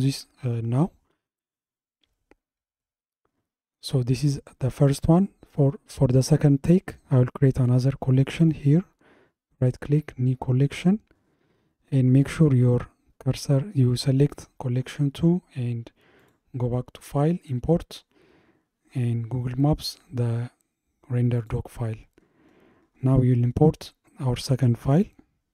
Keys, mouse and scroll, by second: 2.1-2.8 scroll down 2, 2.8-5.9 middle drag, 7.6 click, 8.4-10.7 right drag, 10.7 click, 16.2-19.4 drag.